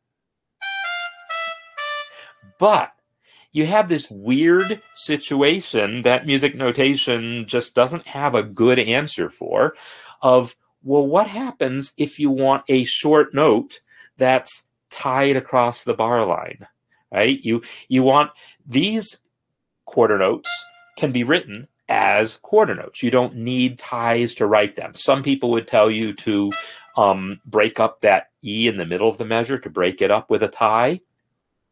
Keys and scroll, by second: 0.2 space.